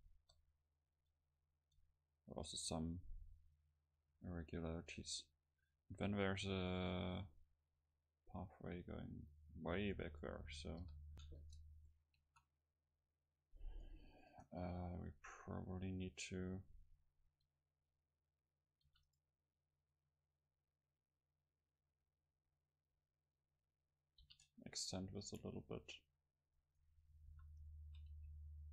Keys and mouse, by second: 0.1 KP_0, 1.1-3.3 middle drag, 9.1 middle click, 9.3-13.8 middle drag, 10.8 KP_7, 11.4 Tab, 12.4 a, 13.8-15.8 drag, 14.4-16.8 right drag, 18.9 e, 19.2-22.1 right drag, 20.0-22.1 drag, 23.0 a, 24.3 ctrl+r, 26.8-28.7 drag, 27.4 a, 28.2 c.